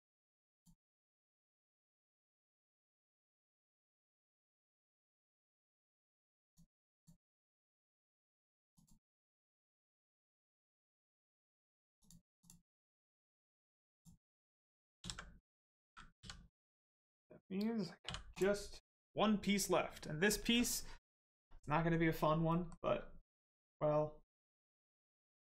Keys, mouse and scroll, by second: 0.5 click, 2.0 right click, 3.4 click, 4.2 q, 6.4 click, 7.3 middle click, 8.7 click, 9.0 right click, 11.9 click, 12.6 middle click, 13.0 scroll down 1, 13.2 middle click, 13.8 click, 14.2 middle click, 18.0 h, 18.2 click, 22.4 middle click, 25.3 Tab.